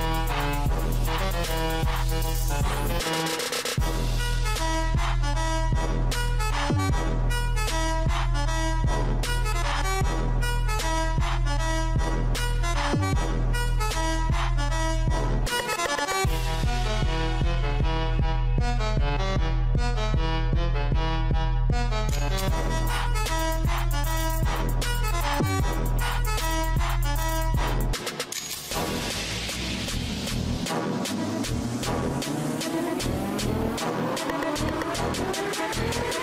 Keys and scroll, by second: 3.7 ctrl+j.